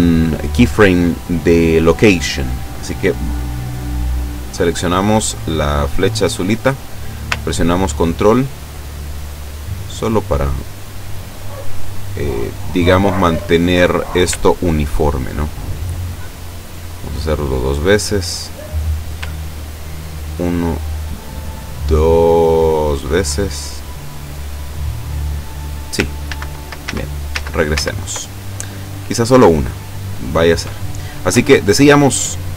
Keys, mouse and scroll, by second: 4.5 click, 6.4-13.4 drag, 13.6-14.1 ctrl+scroll down 1, 14.6-17.3 ctrl+drag, 18.7 right click, 19.4-23.2 ctrl+drag, 26.3 ctrl+z, 31.3 i.